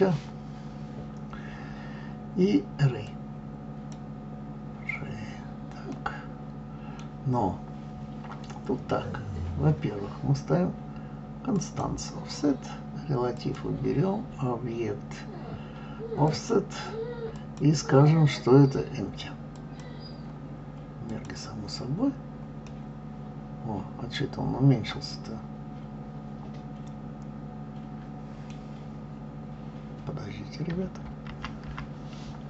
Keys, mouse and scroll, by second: 5.2-5.9 scroll down 3, 5.9-9.0 middle drag, 11.6 click, 13.4 click, 16.3 click, 17.3-20.3 drag, 21.1 click, 22.6-25.7 middle drag, 31.3 ctrl+z, 31.7 ctrl+z.